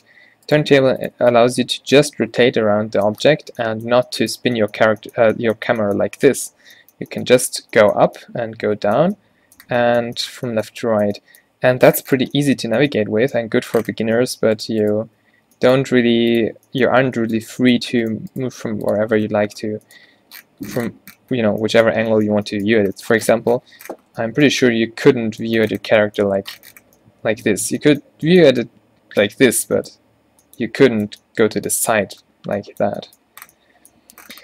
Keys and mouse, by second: 0.5 click, 0.7 g, 1.2 Tab, 5.4 click, 13.6 Tab, 15.3 q, 15.9 g, 16.6 Tab, 17.1 Tab, 18.6 g, 19.1 Tab, 25.0-26.2 middle drag, 28.5-28.8 drag.